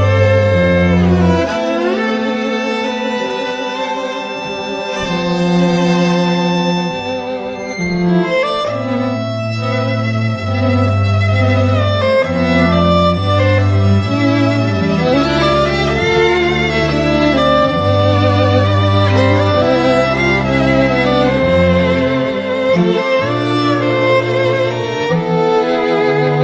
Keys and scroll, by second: 12.7 ], 16.1 ], 17.0 ], 18.3 ], 18.9 ], 24.6 [, 25.9 [.